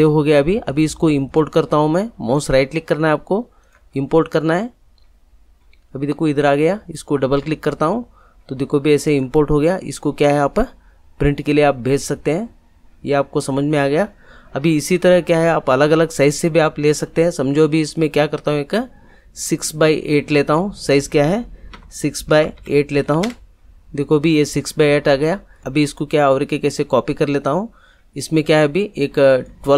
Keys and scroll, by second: 21.7 6, 22.3 Tab, 22.5 8, 23.2 Return.